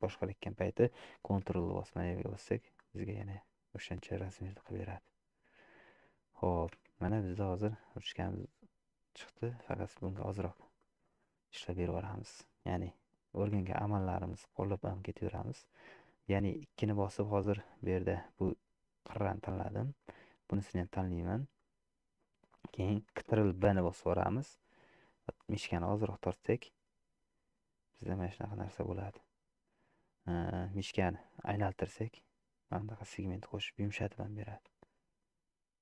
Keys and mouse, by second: 3.8-5.3 middle drag, 6.9 Tab, 7.7-9.6 middle drag, 10.0 shift+middle click, 10.8 middle click, 11.9 Tab, 12.6 click, 13.8 2, 15.1 shift+click, 16.2 middle click, 19.4 middle click, 20.2 shift+click, 21.6 middle click, 23.9 ctrl+b, 34.9 Tab, 35.3-35.8 middle drag.